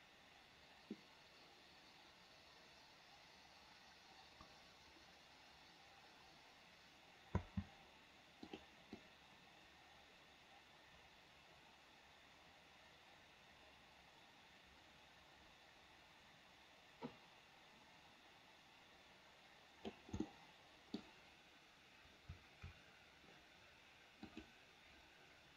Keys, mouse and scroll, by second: 7.6 space, 8.7 click, 9.2-20.2 drag, 20.5 middle click.